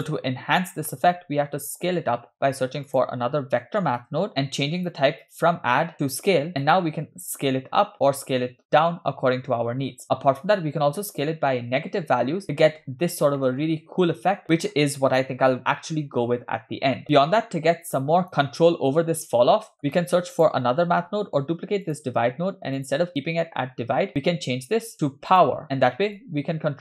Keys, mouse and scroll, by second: 0.9-1.2 middle drag, 1.9 shift+a, 5.3 click, 6.7-12.6 shift+drag, 12.9-13.9 scroll up 4, 13.4 shift+middle drag, 14.3 shift+middle drag, 17.8-18.3 drag, 18.4 scroll down 1, 19.7 middle click, 19.9 click, 20.4 click, 20.9 shift+d, 22.8-25.4 drag, 26.2-26.8 shift+drag.